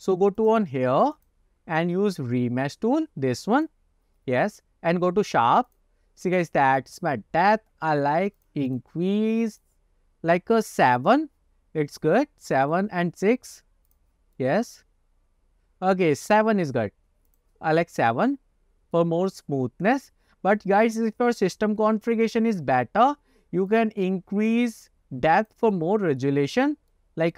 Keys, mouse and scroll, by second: 0.5 click, 1.2-3.8 drag, 5.8 click, 8.5 click, 8.8 click, 9.7 click, 11.8-12.5 scroll up 2, 12.1-12.8 middle drag, 14.0 click, 14.5-16.5 middle drag, 17.4 click, 17.8 scroll down 1, 18.1 middle click, 19.4 scroll up 1, 20.0-21.0 middle drag, 23.8 click, 25.5 click, 25.8-26.3 middle drag, 26.7 scroll up 1, 27.0-27.3 middle drag.